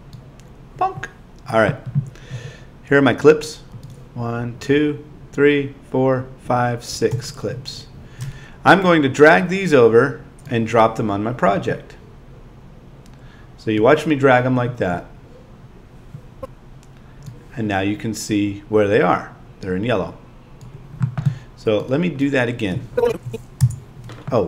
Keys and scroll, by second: 23.6 BackSpace.